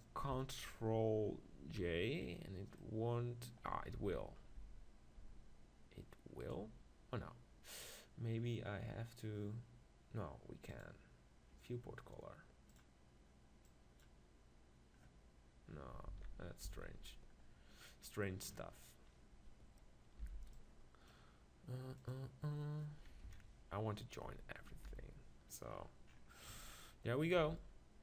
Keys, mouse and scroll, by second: 0.4 Left, 1.6 ctrl+j, 4.0 ctrl+z, 6.4-8.0 right drag, 8.0 click, 13.7-15.1 drag, 16.2 ctrl+z, 16.8 ctrl+z, 17.4-19.0 middle drag, 20.3 b, 22.0-23.8 drag, 23.2 KP_7, 24.7 ctrl+j, 25.9 middle click, 27.4 r.